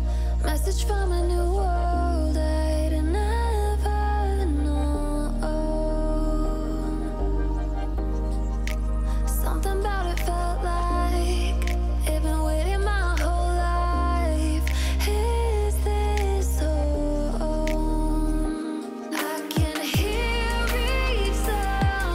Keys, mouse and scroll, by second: 0.5-0.8 alt+scroll down 1, 0.9 click, 1.6-1.9 alt+scroll up 1, 2.2 alt+scroll up 1, 2.7 click, 5.4-6.3 alt+scroll down 1, 6.7 alt+scroll up 1, 6.8 click, 7.2 alt+scroll down 1, 7.6 click, 8.5-8.9 alt+scroll up 1, 9.0 click, 11.8 alt+scroll up 1, 12.2 alt+scroll down 1, 13.7 alt+scroll down 1, 13.9-16.7 drag, 17.1-18.0 alt+scroll down 2, 18.3-20.0 alt+shift+drag, 21.4-22.1 drag.